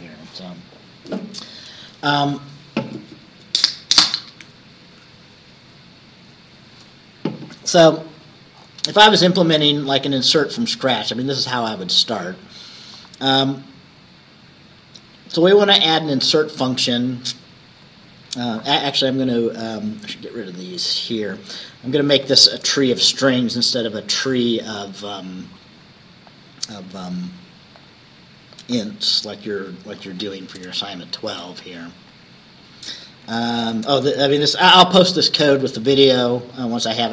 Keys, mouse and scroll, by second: 8.6-9.9 scroll down 6, 10.1-10.4 scroll up 2, 10.4 click, 10.6 scroll down 2, 10.9 click, 11.6-12.2 scroll down 4, 12.7 scroll up 2, 16.3 click, 17.4 Left, 17.8 Right, 21.4 click, 22.7 BackSpace, 24.8 BackSpace, 26.4 click, 27.8 click, 28.8-30.3 drag, 30.7 BackSpace, 31.2 click, 31.4 BackSpace, 32.0 click, 32.2 Down, 32.8 click, 33.3 Down, 33.7 BackSpace, 34.9 Down, 36.4 ctrl+click.